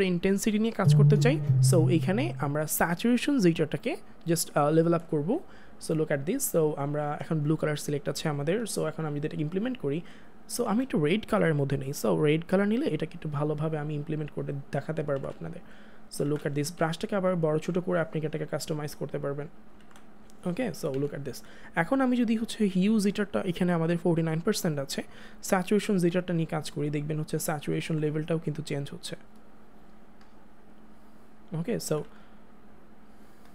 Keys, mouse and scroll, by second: 10.6 ctrl+z, 11.2 click, 15.0 click, 15.1 ctrl+z, 17.5 ], 20.6 [, 25.4 [, 27.9 ctrl+z, 28.9 click, 31.9 click, 32.0 ctrl+z, 32.8 click.